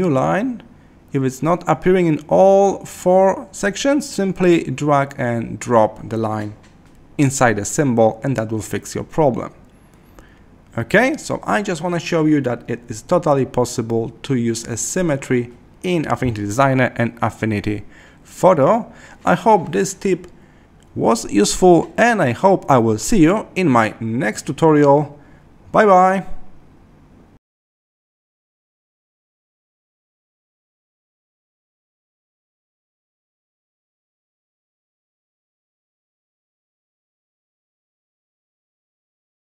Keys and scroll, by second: 23.7 Escape.